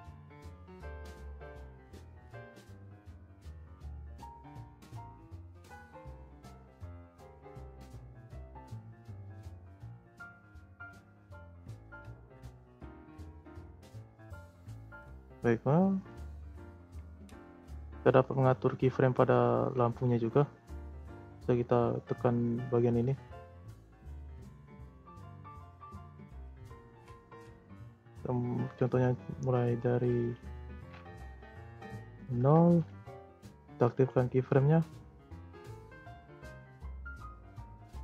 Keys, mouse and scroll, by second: 0.4 click, 0.8 click, 1.4 z, 2.4 click, 2.8 z, 4.0-4.5 scroll down 2, 5.1-6.1 scroll up 1, 6.1 click, 8.0-8.8 scroll down 2, 8.8-14.1 drag, 14.1 scroll up 3, 14.4-17.7 middle drag, 17.7-18.1 scroll down 1, 18.1-19.3 scroll up 1, 19.6-22.7 scroll up 4, 23.6-25.9 drag, 26.4 Delete, 30.2-33.2 drag, 33.9 click, 35.1-38.0 drag.